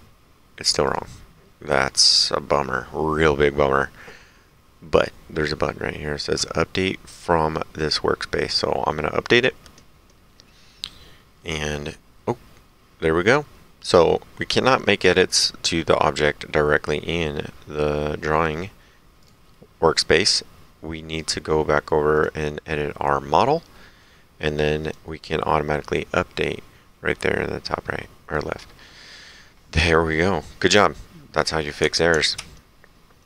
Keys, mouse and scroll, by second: 0.9 click, 7.8 click, 19.2 click, 22.2 click, 23.8 middle click, 24.8 click.